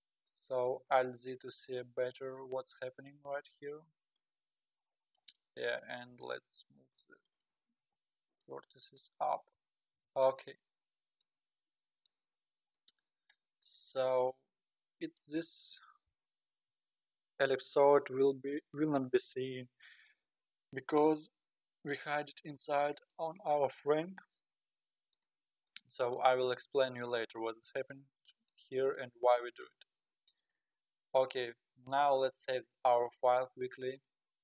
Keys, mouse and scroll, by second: 0.4-1.0 scroll down 2, 1.0 alt+scroll down 1, 1.6 g, 4.9-5.4 scroll down 3, 5.4 click, 6.1 g, 7.8 g, 9.6 Tab, 10.0 alt+z, 10.8-11.4 middle drag, 11.4-11.8 scroll up 3, 11.8-12.3 middle drag, 12.3-12.8 scroll down 4, 12.8-13.5 scroll up 2, 13.5-16.6 middle drag, 22.3-23.8 middle drag, 23.8-24.1 scroll up 5, 25.2 click, 26.6-27.3 middle drag, 27.3-27.7 scroll down 5, 28.2-29.8 middle drag, 29.8-30.3 scroll up 6, 30.4-32.7 middle drag, 32.7 ctrl+s.